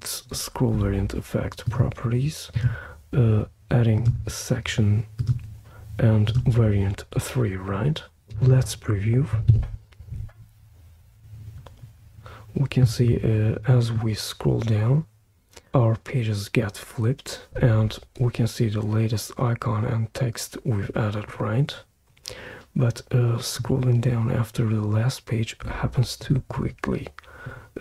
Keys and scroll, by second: 9.5 super+p.